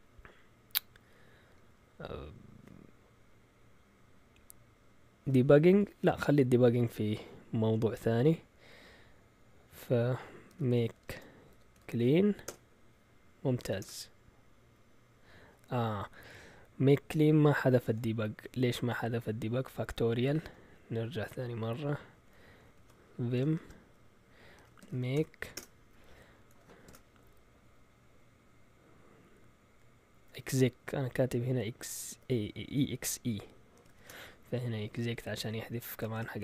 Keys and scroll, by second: 10.2-14.0 typing, 20.7-21.2 typing, 22.1 Down, 22.3 Down, 22.5 Down, 22.6 Down, 22.8 Down, 23.0-27.5 typing, 25.5 Return, 30.4-31.4 Right, 31.0 typing, 32.5 Left, 33.5-34.4 typing, 34.8 Down, 35.8 Escape, 35.9-36.4 typing.